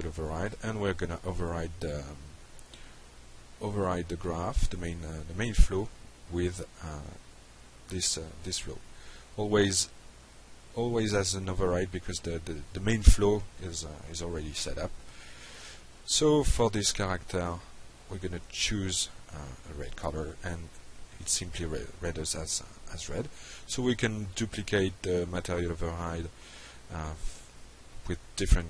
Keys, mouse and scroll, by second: 1.3 shift+click, 2.5 drag, 3.3-4.2 shift+drag, 5.2-5.8 shift+drag, 6.2 click, 7.0 click, 7.7 click, 8.2-8.6 drag, 9.4 click, 9.7 click, 10.5 click, 12.0 click, 14.9 drag, 16.9 click, 17.3 click, 20.3 click, 20.9 click, 24.2 click, 25.3 ctrl+c, 25.6 click, 26.2 click, 26.7 ctrl+v, 27.1 drag, 27.8 shift+click.